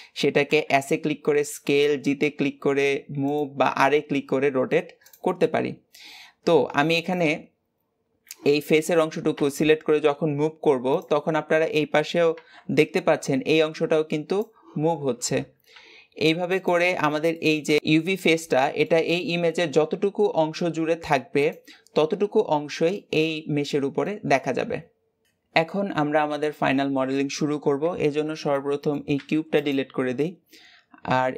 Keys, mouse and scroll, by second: 22.4-22.8 scroll down 1, 22.8-25.2 middle drag, 27.7 Tab, 28.4 middle click, 29.0 x.